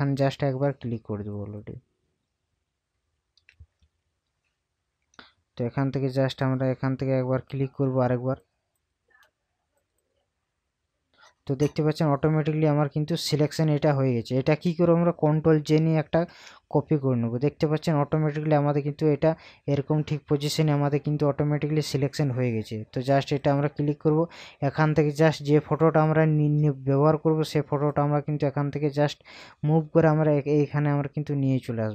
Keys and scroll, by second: 3.9 ctrl+KP_Subtract, 16.1 ctrl+j.